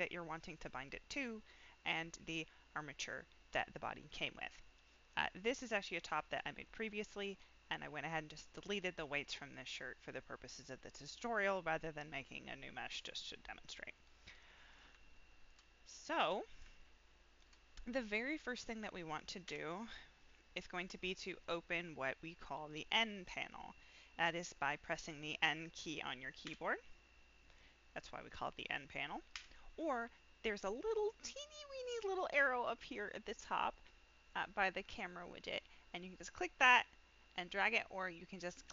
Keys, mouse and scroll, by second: 1.8 click, 2.4 middle click, 3.4 middle drag, 4.2 middle click, 5.4 click, 5.9 middle click, 14.3-14.7 middle drag, 15.1-15.4 shift+middle drag, 15.8 middle click, 16.3 scroll up 1, 16.7-17.4 shift+middle drag, 19.4 n, 20.3 middle click, 26.4 n, 29.3 n, 36.2-37.2 drag.